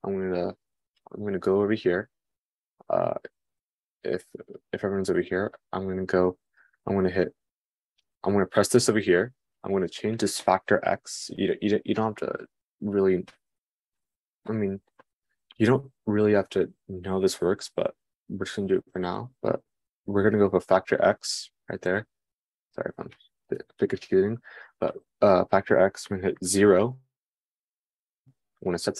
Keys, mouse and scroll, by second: 9.9-28.9 drag.